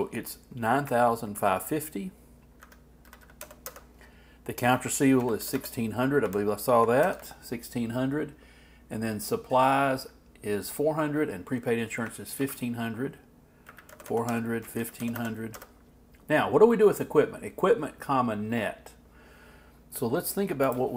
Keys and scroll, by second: 1.3 alt+Right, 6.8 alt+Down, 7.0 alt+Left, 12.4 alt+Right.